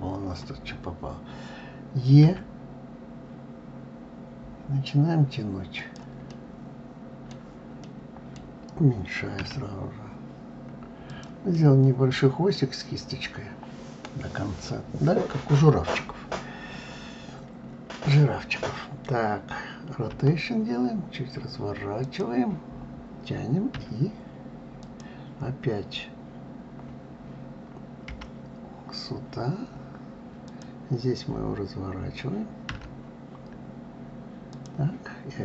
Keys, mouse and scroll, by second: 5.9-9.0 middle drag, 9.0 s, 11.1-12.7 middle drag, 12.7-15.8 scroll down 2.